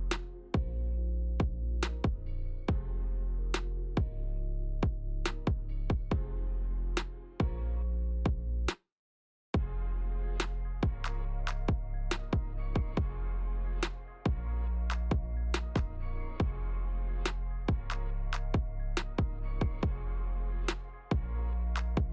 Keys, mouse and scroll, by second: 1.7 middle click, 2.4 scroll up 1, 2.5 shift+middle click, 3.0 middle click, 4.2 g, 5.5 middle click, 6.5 click, 6.7 middle click, 8.0 middle click, 8.5 middle click, 8.7 shift+middle click, 9.1 shift+middle click, 9.4 middle click, 9.6 scroll up 1, 10.4 click, 10.4 scroll up 2, 11.7 g, 14.1 g, 15.1 middle click, 15.8 s, 17.1 click, 17.6 s, 18.4 click, 18.8 middle click, 19.5 middle click, 20.5 middle click, 21.1 click, 21.7 s.